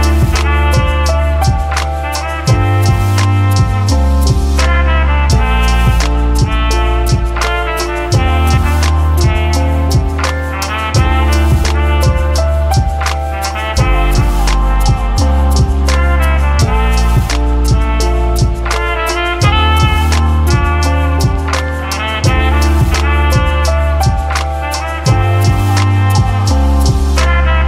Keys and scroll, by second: 0.7-5.4 typing, 14.3 ctrl+d, 16.4 ctrl+d, 17.0-17.9 typing, 22.4-23.7 typing, 24.7 f, 25.7 typing.